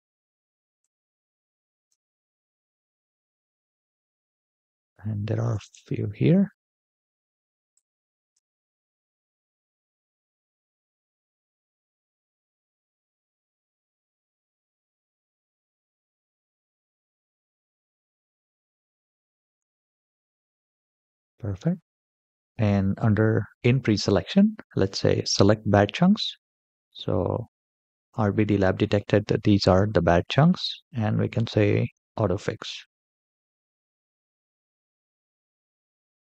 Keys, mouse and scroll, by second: 0.5-1.7 ctrl+drag, 2.9 middle click, 3.7-4.1 middle drag, 4.4-5.2 shift+middle drag, 7.5-8.1 shift+drag, 9.2-10.4 middle drag, 10.8-11.3 shift+middle drag, 11.7 scroll down 1, 12.1 shift+middle drag, 12.7-14.0 middle drag, 14.4-17.0 shift+middle drag, 17.3 scroll down 2, 17.7-18.7 shift+middle drag, 19.0-19.3 scroll down 2, 19.5-19.9 shift+middle drag, 20.1-20.5 middle drag, 20.8-21.2 shift+middle drag, 22.0-23.1 scroll up 4, 25.0 click, 26.4 middle click, 27.5-27.8 shift+middle drag, 31.7-34.3 drag, 36.1 click.